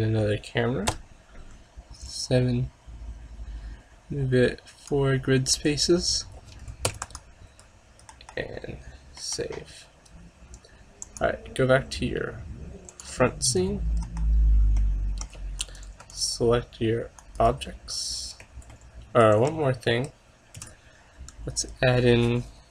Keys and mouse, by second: 1.0 KP_7, 2.1-3.9 drag, 6.3-8.2 middle drag, 7.0 ctrl+s, 8.2 KP_0, 11.1-12.8 drag, 13.5 middle click, 14.1 KP_0, 14.4 middle click, 15.3-17.0 drag, 15.7-17.8 right drag, 17.8 click, 18.5 a, 18.8 middle click, 19.0 click, 19.2-20.5 middle drag, 20.6 shift+a.